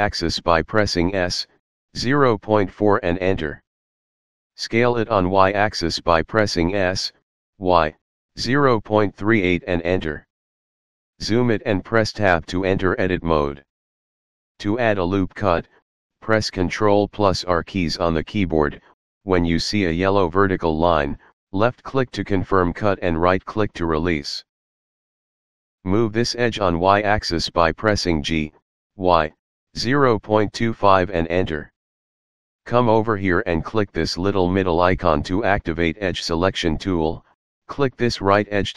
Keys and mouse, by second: 0.2 x, 0.2 KP_Decimal, 1.1 KP_4, 1.8 Return, 4.5 s, 6.4 x, 6.4 KP_Decimal, 7.0 KP_3, 8.5 Return, 13.0 Tab, 18.0 ctrl+r, 20.1 click, 21.7 right click, 27.2 g, 28.6 y, 29.8 KP_Decimal, 30.2 KP_2, 30.5 KP_5, 30.9 Return, 36.2 click.